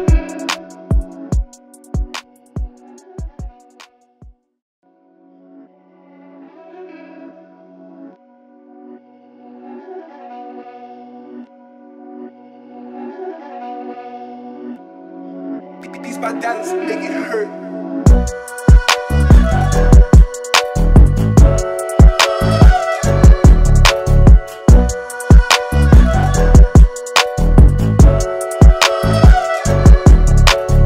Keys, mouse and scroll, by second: 5.3 alt+scroll up 1, 5.7 space, 5.8-7.2 drag, 7.2 w, 7.8-30.4 drag, 30.4 alt+scroll down 1, 30.8 space.